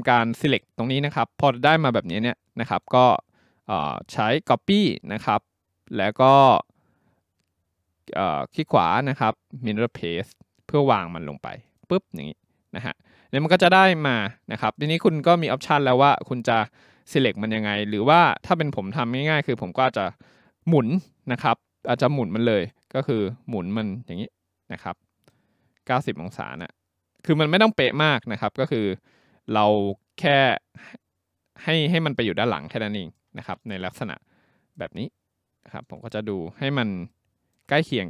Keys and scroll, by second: 28.1 w.